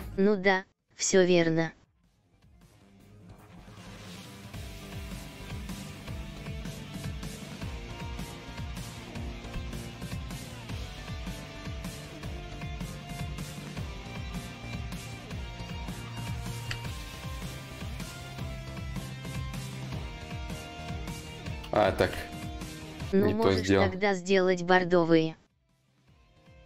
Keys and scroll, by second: 21.3 ctrl+z, 21.3 y, 23.9-24.6 typing, 25.3 ctrl+z.